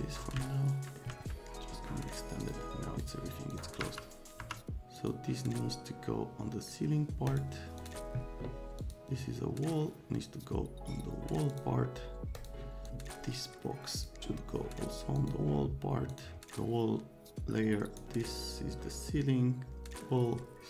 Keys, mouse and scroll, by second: 0.4 alt+middle click, 2.4 click, 3.0 click, 3.8 F3, 4.4 F3, 5.0 click, 7.3 click, 7.8 click, 8.8 click, 11.5 click, 12.3 click, 12.8 click, 13.9 click, 15.2 click, 16.1 click, 16.3-18.0 drag.